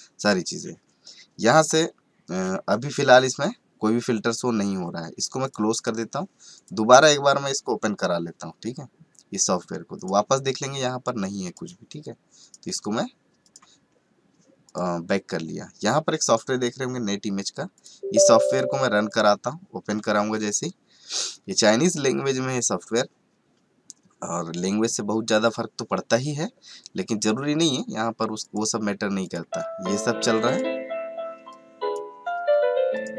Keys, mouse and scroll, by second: 0.2 click, 3.3 click, 6.2 click, 7.6 click, 10.0 click, 16.3 right click, 17.7 click, 17.9 right click, 18.3 click, 18.4 right click, 18.8 click, 19.0 right click, 19.2 click.